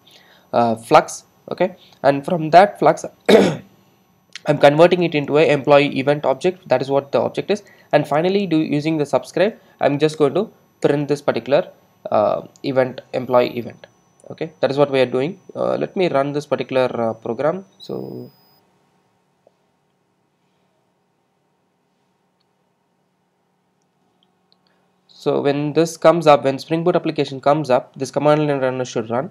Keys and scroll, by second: 10.2 alt+Return.